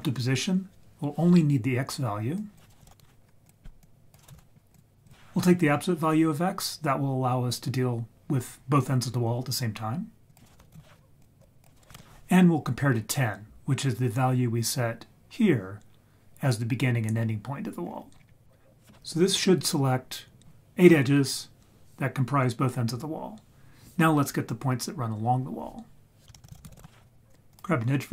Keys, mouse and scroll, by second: 2.4-3.6 drag, 3.8-5.1 drag, 10.3 click, 11.6 click, 14.2-17.8 scroll down 6, 15.2-17.8 scroll up 1, 17.8-19.9 scroll up 6, 26.2 shift+a, 26.3 shift+a.